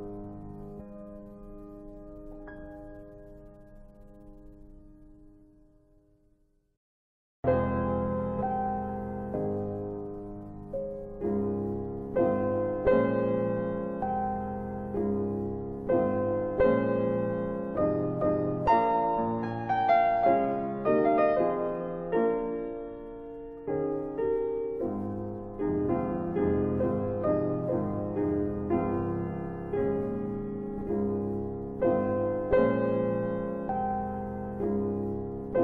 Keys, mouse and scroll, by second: 0.0 scroll up 2, 1.0 alt+x, 1.6 scroll up 1, 2.1 middle click, 4.3 click, 7.7 click, 9.3 click, 12.6 click, 13.2 middle click, 14.9 click, 16.1 ctrl+click, 16.7 middle click, 17.8 ctrl+click, 18.4 middle click, 20.2 ctrl+click, 20.8 middle click, 22.2 ctrl+click, 22.3 ctrl+double click, 23.9 ctrl+double click, 24.0 click, 25.9 click, 31.7 click, 34.0 click, 35.1 shift+double click.